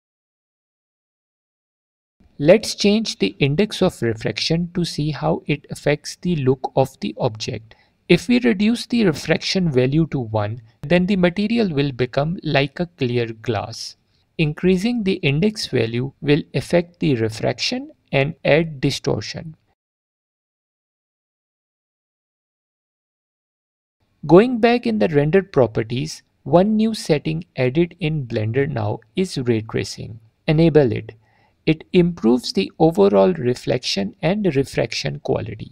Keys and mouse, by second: 7.8-9.8 shift+drag, 10.1 alt+click, 12.5-16.5 middle drag, 16.5 shift+click, 16.9 shift+middle click, 17.8 alt+click, 26.4 click, 28.7-30.9 drag, 32.5 click, 35.0 middle click.